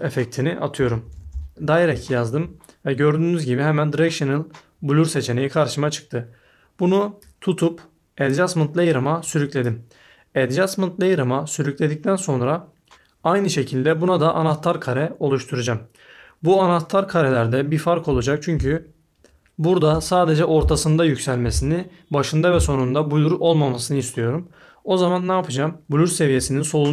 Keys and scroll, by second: 0.5-1.8 typing.